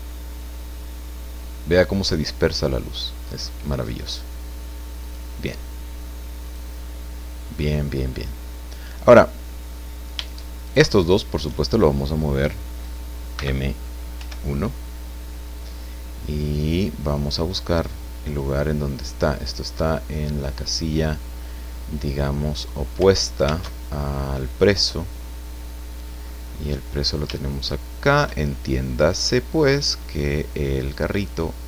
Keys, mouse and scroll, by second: 0.3-4.2 middle drag, 5.0 click, 6.4 click, 7.2 scroll down 1, 7.6-10.1 middle drag, 10.1 shift+click, 10.6 shift+right click, 13.3 m, 14.1 1, 16.6 click, 18.2 click, 23.7 alt+Tab, 24.7 scroll down 2, 25.3 scroll down 2, 26.2-26.7 scroll down 2, 27.5 shift+click, 29.3-31.1 drag.